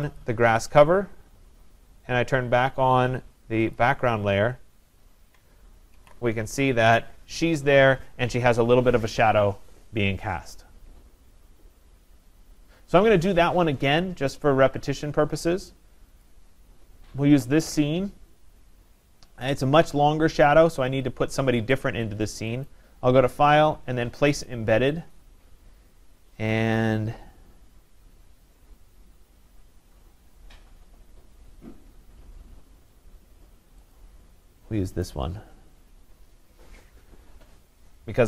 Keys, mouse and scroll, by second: 0.2 click, 3.8 click, 6.0 ctrl+0, 16.3 click, 22.7 click, 24.5 click, 34.0 click, 35.1 click.